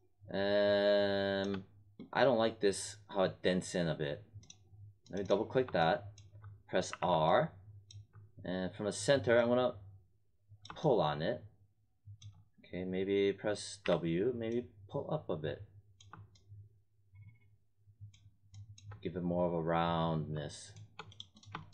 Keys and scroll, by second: 6.9 r, 13.8 w.